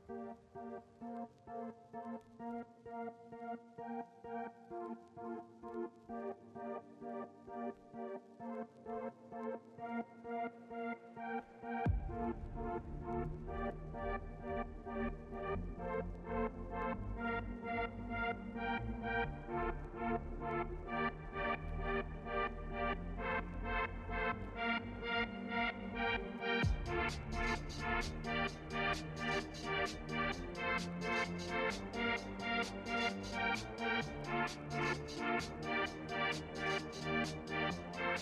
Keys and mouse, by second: 6.0 ctrl+s, 7.5 click, 8.6 click, 9.1 click, 21.4 ctrl+s, 29.4 ctrl+s.